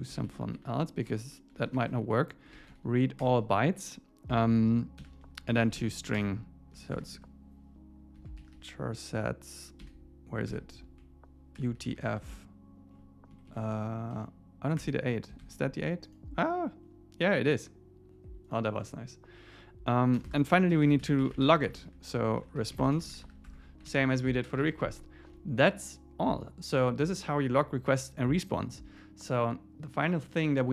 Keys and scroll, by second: 0.6 shift+Left, 3.2 Return, 6.2 Return, 6.6 Left, 13.4 Down, 14.4 Down, 14.8 Return, 15.4 ⟲, 20.2 Return, 23.5 Tab, 23.9 super+s, 24.1 Down, 24.6 super+s.